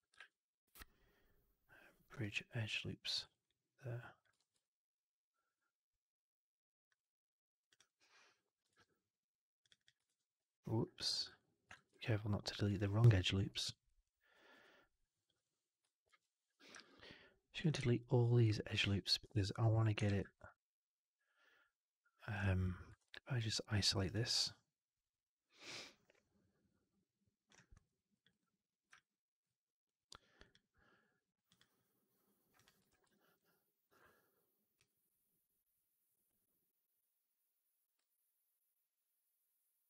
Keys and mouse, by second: 0.0 shift+Tab, 3.2 alt+right click, 3.3 alt+click, 4.3 shift+x, 4.5-6.8 alt+drag, 7.5 click, 7.7 click, 8.7 ctrl+BackSpace, 9.5 click, 9.6 click, 10.1 ctrl+BackSpace, 11.1 ctrl+z, 11.2 alt+click, 11.8 shift+x, 11.9 alt+click, 13.8 ctrl+BackSpace, 15.1 click, 15.2 click, 16.2 ctrl+BackSpace, 16.7 alt+click, 17.6 shift+x, 18.3 click, 18.5 click, 19.3 ctrl+BackSpace, 20.1 shift+x, 20.2-22.2 alt+drag, 22.9 alt+q, 23.2 alt+click, 23.7 alt+middle click, 23.8 alt+right click, 24.0-27.4 alt+drag, 27.6 2, 28.0 click, 28.2 click, 28.8 alt+click, 30.4 click, 31.4 click, 32.4 click, 32.8 shift+x, 33.0 middle click, 33.2 right click, 34.6-39.8 drag.